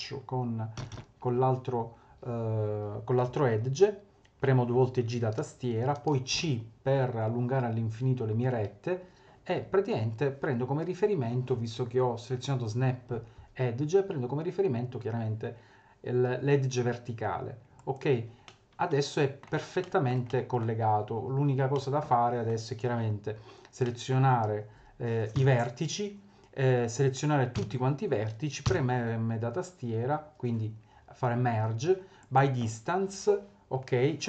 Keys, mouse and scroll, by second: 0.8 g, 18.5 middle click, 19.8 shift+middle click, 20.3 middle click, 21.0-21.5 scroll up 1, 21.8 middle click, 23.8 middle click, 25.4 1, 27.6 a, 28.6 m.